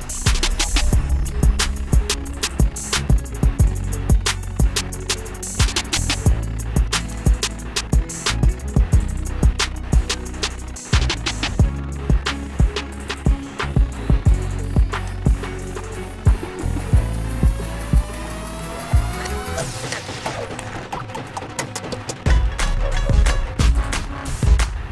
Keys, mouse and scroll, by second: 3.5 click, 5.5 ctrl+g, 7.3 click, 9.3 Delete, 12.5 ctrl+z, 18.2 click, 20.5 ctrl+shift+].